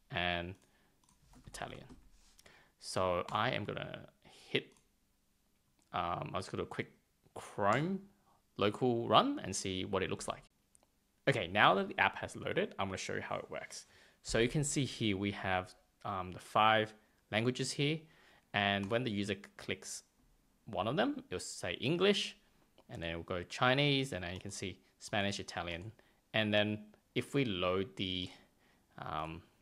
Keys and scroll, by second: 1.0 super+a, 1.3 shift+i, 3.3 super+s.